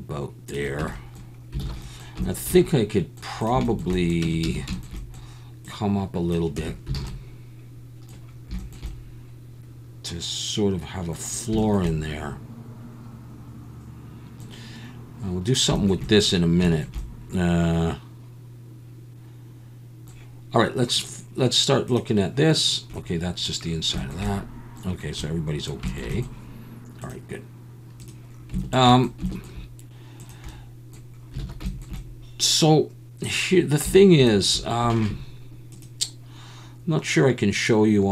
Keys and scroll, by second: 0.8 Tab, 1.6 alt+a, 4.2 Tab, 4.5 a, 6.6 Tab, 7.0 alt+a, 7.1 Tab, 31.4 alt+a.